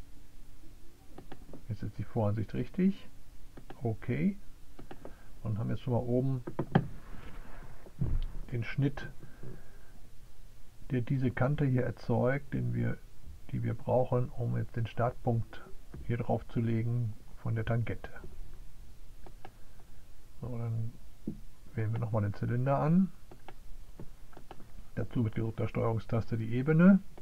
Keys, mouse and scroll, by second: 0.0 click, 0.8 click, 4.3 click, 20.0 right click, 21.7 click, 24.3 click.